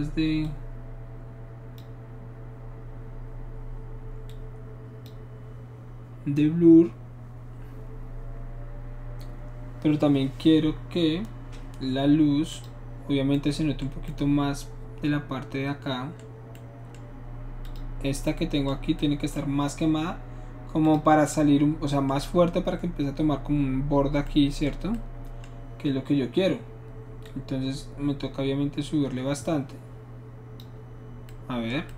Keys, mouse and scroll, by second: 0.4-1.8 drag, 4.3 click, 12.5 click, 17.6 click, 19.0-19.5 middle drag, 20.9 click, 27.3-30.6 drag.